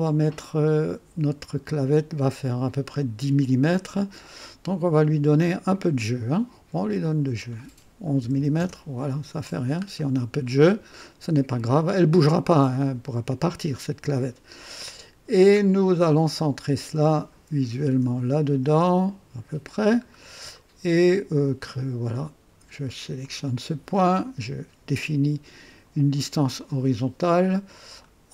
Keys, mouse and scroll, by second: 7.0 click, 8.2 typing, 8.6 Return, 9.8 scroll down 1, 10.5-11.1 right drag, 16.7-19.9 drag, 20.1 scroll down 2, 20.5-21.4 right drag, 23.2 click, 26.6 click.